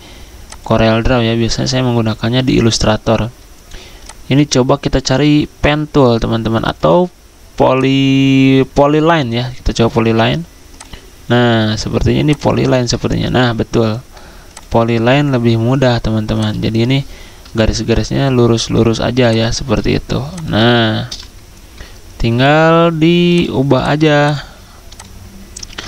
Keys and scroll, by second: 1.3 End, 2.0 Delete, 25.7 ctrl+z.